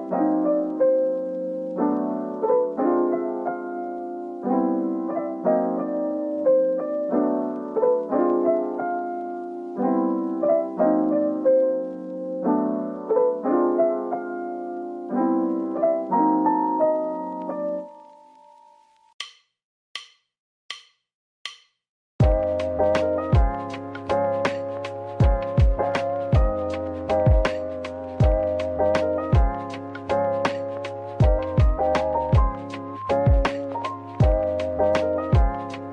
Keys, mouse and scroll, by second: 2.9 ctrl+z, 4.4 ctrl+z, 4.6 shift+click, 5.2 shift+click, 5.4 ctrl+l, 8.0 Tab, 10.0 Tab, 10.2 super+click, 13.8 alt+click, 14.4 click, 15.8 double click, 16.2 scroll down 1, 16.4 Tab, 17.0-19.3 scroll down 1, 19.3-20.7 scroll up 1, 27.3-27.8 typing, 30.1-30.9 scroll down 1, 30.9 typing, 31.5 double click, 34.5 typing.